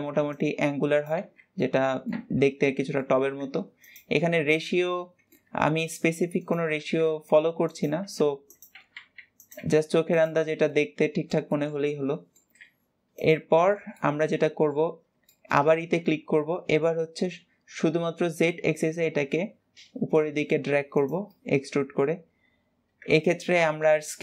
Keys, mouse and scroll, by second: 1.6 middle click, 2.0 Tab, 2.4 middle click, 3.2 s, 4.0-5.4 middle drag, 5.4 g, 10.3 scroll down 2, 10.6-12.4 middle drag, 12.4 s, 13.4-14.7 shift+middle drag, 14.7-15.1 scroll up 1, 15.1 shift+middle click, 15.7 e, 21.2-24.2 middle drag.